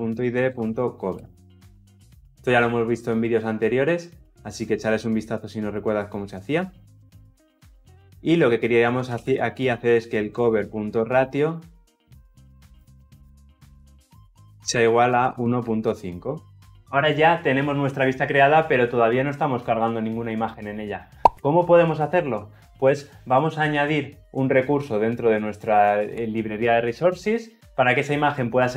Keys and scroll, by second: 14.2 Return.